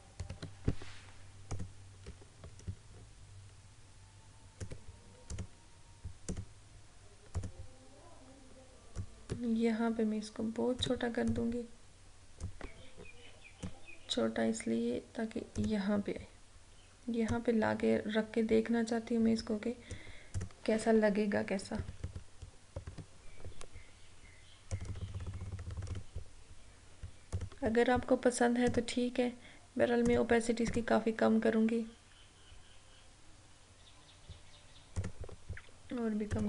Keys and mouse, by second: 1.6-20.5 drag, 21.9 ctrl+=, 24.8 click, 25.8 click, 35.1 click.